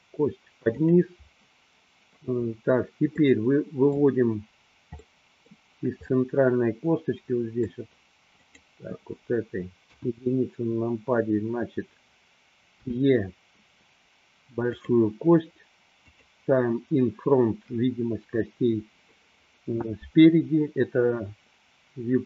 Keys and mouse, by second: 3.4 middle click, 5.5 middle click, 6.5-8.0 middle drag, 8.6 click, 10.2 KP_1, 12.8 e, 15.0 click, 16.1 click.